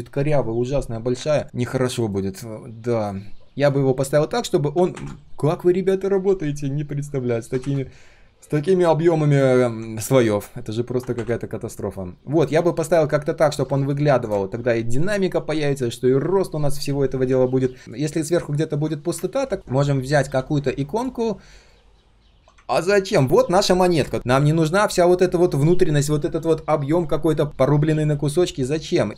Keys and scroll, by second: 19.5 ctrl+z, 21.5 ctrl+shift+3, 23.2 ctrl+shift+3, 24.9 ctrl+shift+3, 28.5 ctrl+shift+3.